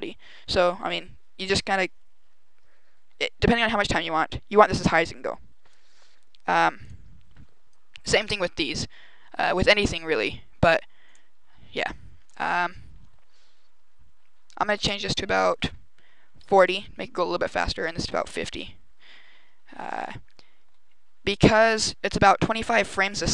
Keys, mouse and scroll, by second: 6.6 click, 11.0 click, 11.8-12.4 scroll up 3, 14.8 click, 17.7 click.